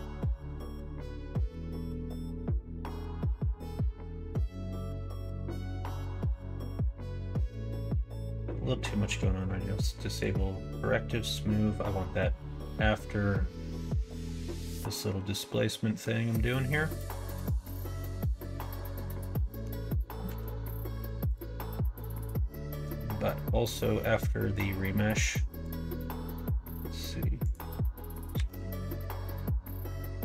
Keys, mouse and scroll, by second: 7.7 click, 12.2-14.6 drag, 19.3 middle click, 20.3 ctrl+s, 25.6 click, 27.4-30.2 drag.